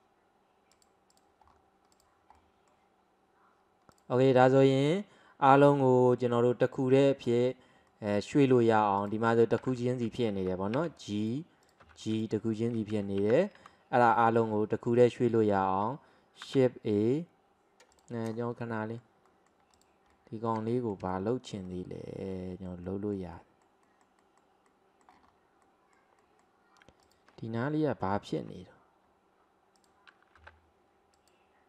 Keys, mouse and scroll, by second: 1.5-2.0 scroll down 2, 2.0 click, 2.4-4.0 middle drag, 4.0 drag, 4.2-9.0 middle drag, 9.0 click, 9.7 f, 10.8 g, 11.7 click, 11.9 g, 13.0 ctrl+z, 13.2 ctrl+z, 13.6 ctrl+z, 14.2 middle click, 14.6-15.0 scroll down 1, 15.0-16.5 middle drag, 16.5 shift+a, 18.0 drag, 18.4 scroll up 2, 18.6-19.8 middle drag, 19.8 drag, 20.2-25.3 middle drag, 25.3-25.7 scroll up 2, 25.7-27.1 middle drag, 27.1 click, 28.5 Tab, 29.1-29.8 scroll up 1, 29.8 click, 30.4 g.